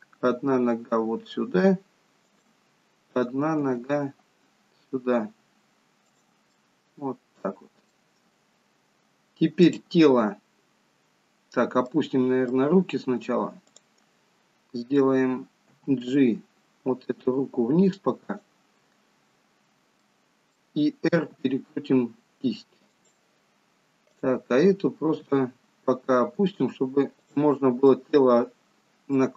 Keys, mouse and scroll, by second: 3.1 click, 3.8 g, 6.6 middle click, 8.3 scroll up 4, 9.6 click, 10.3-11.5 scroll down 1, 11.5-12.2 scroll down 2, 12.0 middle click, 13.7 click, 15.9 g, 19.6-20.1 scroll up 3, 20.1 middle click, 21.3 r, 24.1 click, 25.3 g, 27.9 middle click.